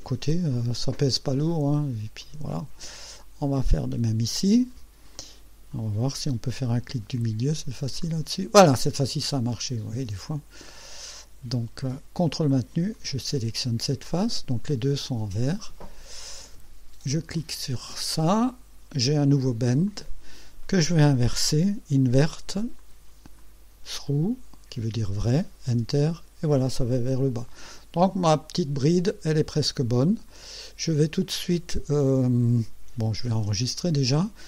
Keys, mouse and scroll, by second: 0.6-1.9 drag, 2.3 click, 3.9 click, 5.2-5.9 drag, 8.1 middle click, 9.0-11.0 drag, 13.0 ctrl+click, 14.1-16.6 ctrl+drag, 17.4 click, 19.2 scroll down 1, 19.9 click, 22.8 click, 23.4 click, 24.1 click, 25.8 Return, 27.0-28.2 drag, 28.3 scroll up 2, 30.3 click, 33.4 ctrl+s.